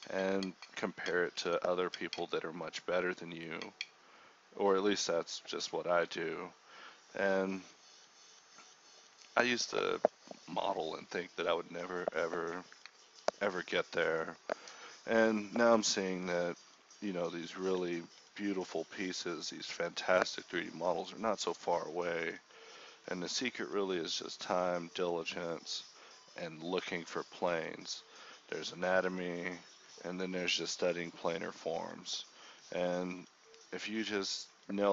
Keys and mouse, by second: 0.5 g, 1.2 click, 1.9 g, 2.4 click, 2.5 g, 2.8 click, 3.6 g, 3.9 click, 4.4 a, 5.0 k, 6.4 a, 6.8 right click, 8.2 a, 8.8 k, 9.9 x, 10.3 click, 11.1 middle click, 11.4 Tab, 12.0 KP_4, 12.6 KP_1, 13.1 Tab, 13.6-15.9 typing, 14.4 click, 14.9 click, 15.7 click, 16.3 click, 16.4 Tab, 17.0 ctrl+1, 17.7 ctrl+z, 17.7 Tab, 18.4 click, 18.8 g, 19.1 click, 19.4 click, 19.6 g, 19.9 click, 20.3 click, 20.9 alt+s, 22.4 ctrl+b, 24.6-25.8 right drag, 25.8 ctrl+b, 26.9 shift+right click, 27.6 shift+right click, 27.9 g, 28.8 g, 29.6 g, 30.9 g, 31.4 g, 32.1 alt+s, 32.7 alt+s, 33.8 g, 34.4 g.